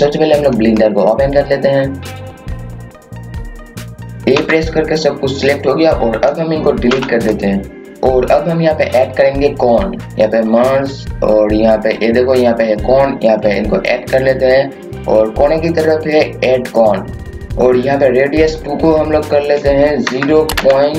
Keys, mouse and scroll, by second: 4.3 a, 6.9 Delete, 7.8 click, 17.2 KP_0, 19.2 click, 20.0 KP_0, 20.5 KP_Decimal.